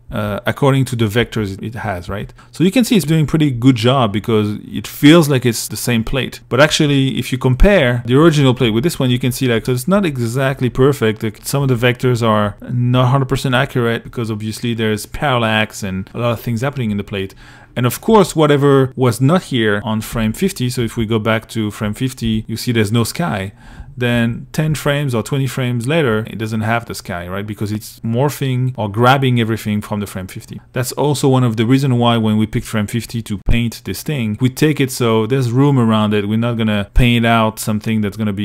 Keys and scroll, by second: 0.4 Right, 1.3 Right, 5.9-13.1 typing, 16.1 2, 17.3 i, 20.2 Left, 21.4 Left, 23.4 shift+Right.